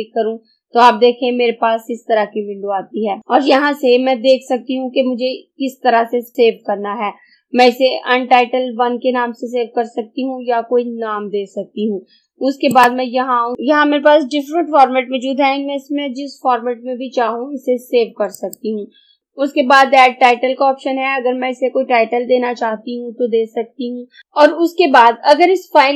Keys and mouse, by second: 12.7 click, 18.5 click.